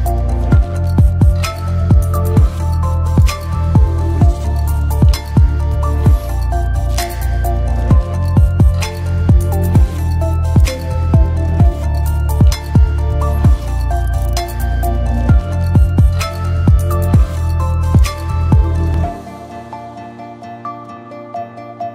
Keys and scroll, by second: 0.0-0.7 typing, 14.2-14.9 typing.